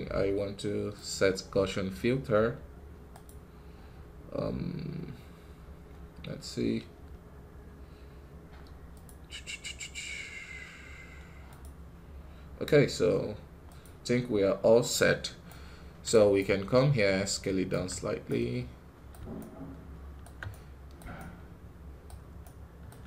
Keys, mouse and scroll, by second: 0.8-15.4 drag, 15.4-23.0 right drag.